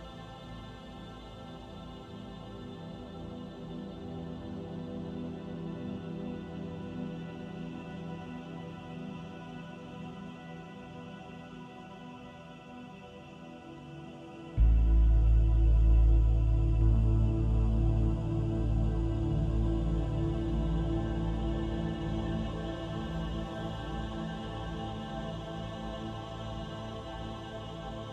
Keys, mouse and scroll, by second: 9.8 click, 10.7 middle click, 13.7 click, 14.3 click, 17.8 middle click, 18.8-19.2 scroll up 2, 19.2 shift+middle click, 19.7 middle click, 23.9-24.4 scroll down 2, 24.6 shift+middle click, 26.1 click.